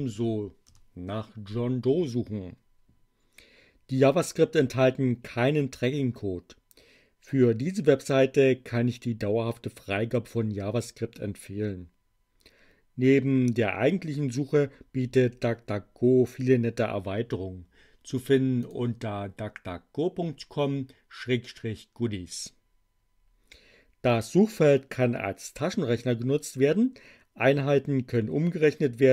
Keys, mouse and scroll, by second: 0.0-0.6 typing, 18.5 click.